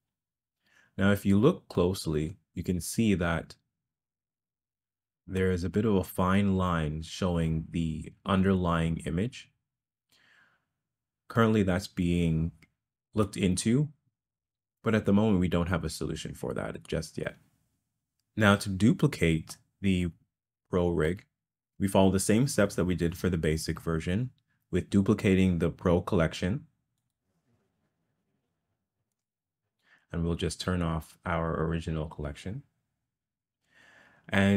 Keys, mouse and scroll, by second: 1.9-2.7 middle drag, 4.6-5.6 middle drag, 11.4-13.3 middle drag, 19.6-21.1 middle drag, 27.2-29.4 right drag, 31.6 click.